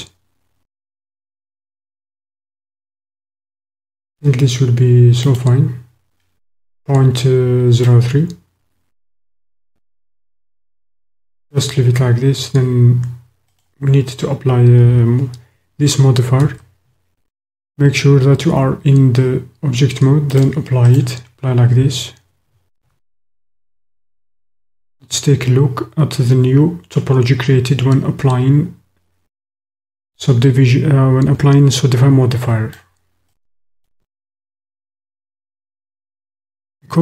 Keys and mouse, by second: 5.2 click, 7.8-11.0 drag, 13.6-14.2 drag, 16.4 Tab, 20.3-21.0 drag, 22.9 Tab, 23.8 click, 24.4 click, 25.4 click, 26.1-28.0 middle drag, 28.0 click, 28.2 middle click, 28.5 click, 28.8-30.0 middle drag, 30.0-32.9 drag, 32.9 middle click, 33.5 click, 34.8 shift+middle click.